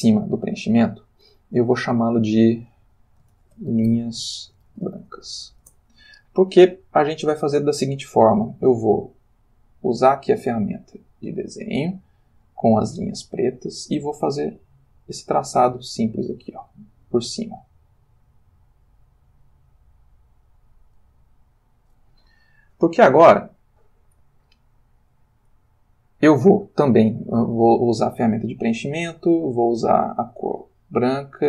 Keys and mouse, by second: 2.0 click, 3.3-5.4 typing, 5.6 shift+Return, 9.9 click, 12.5 click, 13.0 click, 15.3-16.6 drag, 17.6-18.8 drag, 19.4 click, 21.0-22.1 drag, 28.9 click, 29.8 click, 30.8 click.